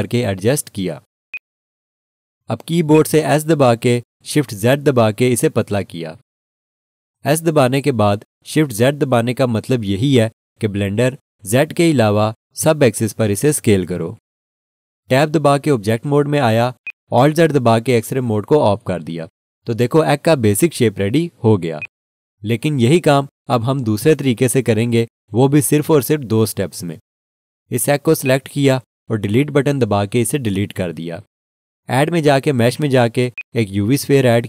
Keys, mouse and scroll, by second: 0.4 click, 5.4 s, 5.8 shift+z, 16.8 click, 17.6 Tab, 18.8 alt+z, 21.8 alt+click, 25.0 1, 28.2 click, 30.8 Delete, 33.3 click.